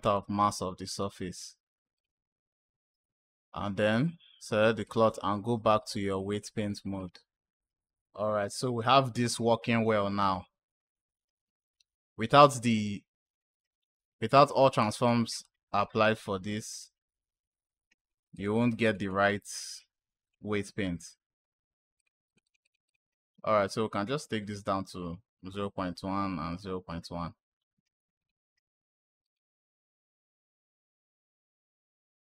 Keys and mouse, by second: 1.8-3.5 drag, 3.8 click, 4.7-6.3 drag, 17.8 click, 18.2 click, 18.4 click, 18.5 click, 18.7 click, 18.8 click, 20.1 click, 21.8 click, 22.1 click, 22.3 click, 22.5 click, 22.7 click, 28.1 click, 29.1 click, 29.7 click, 30.9 click.